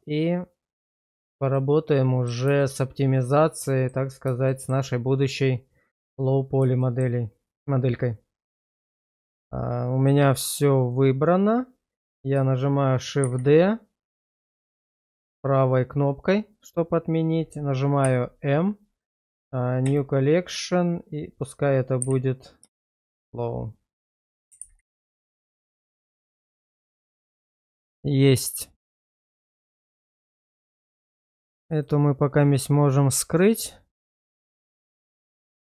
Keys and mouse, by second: 1.5-2.3 middle drag, 2.6 shift+middle drag, 3.2 middle click, 4.5 shift+middle click, 6.8 shift+middle click, 13.8 shift+d, 15.7-18.0 right drag, 18.0 m, 29.1 click, 30.0 click, 34.9 click.